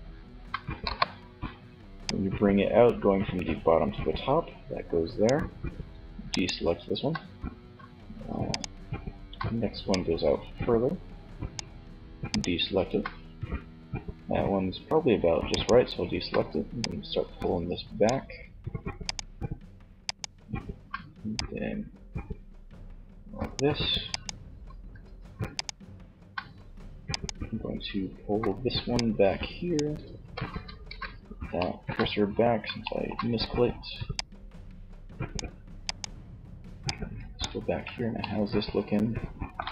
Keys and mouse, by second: 29.9 shift+c, 37.1 z.